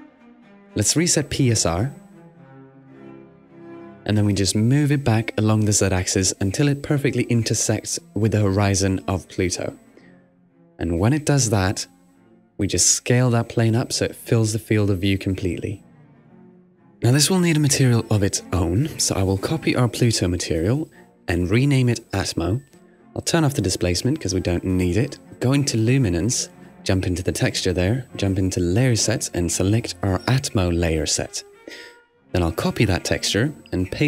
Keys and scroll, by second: 1.2-2.2 typing, 2.5 Return, 15.7 |, 15.9 Tab, 16.0 |, 22.0-23.2 typing.